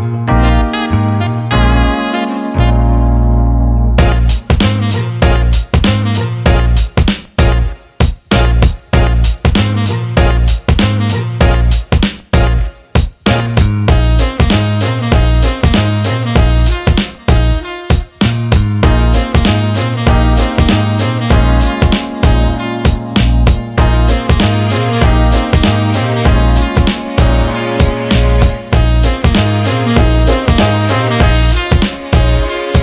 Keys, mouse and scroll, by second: 2.2 alt+middle click, 4.3 alt+shift+middle click, 7.8 click, 9.0 ctrl+z, 10.1-13.0 drag, 13.5 alt+shift+middle click, 15.8 click, 16.9 shift+d, 18.1 click, 20.3 click, 22.7-24.9 drag, 26.2 click, 29.5 click, 30.8 ctrl+z, 31.1 ctrl+z, 31.8 click.